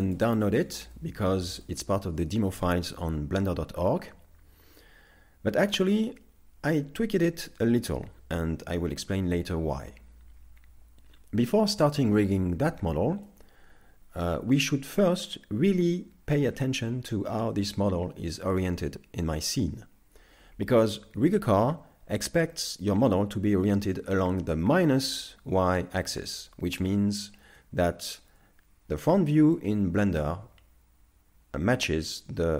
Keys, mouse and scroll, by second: 0.7 right click, 1.0 middle click, 1.6 a, 13.3 middle click, 28.2 KP_1, 29.6 shift+middle click.